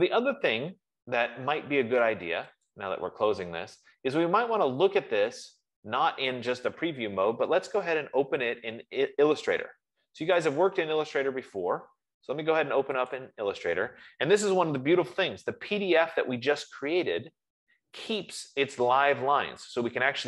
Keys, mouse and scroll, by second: 3.3 click, 5.9 click, 10.8 click, 13.4 click, 17.4 click, 18.1 click.